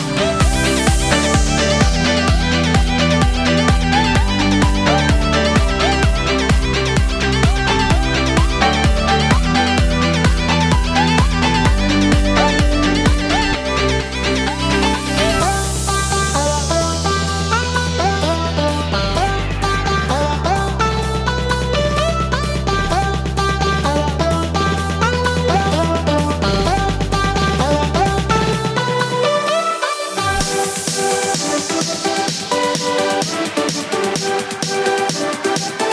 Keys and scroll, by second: 4.4 z, 9.2 ctrl+z, 18.0 ctrl+z.